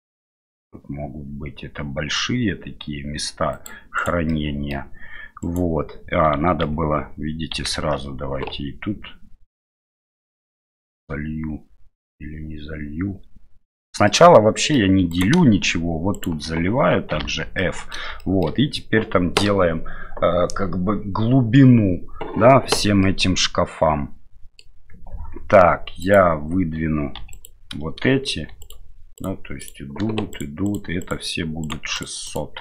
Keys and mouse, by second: 4.3 middle click, 5.4 right click, 6.6 ctrl+z, 7.5 ctrl+z, 14.2 middle click, 15.1 right click, 16.1 shift+right click, 17.1 f, 17.6 middle click, 18.2 shift+middle click, 23.1-24.8 middle drag, 26.0 right click, 27.2 3, 27.3 right click, 28.6 right click, 29.2 right click, 30.3 shift+right click, 30.6 shift+right click, 31.0 shift+right click, 31.6 shift+right click, 32.3 shift+right click.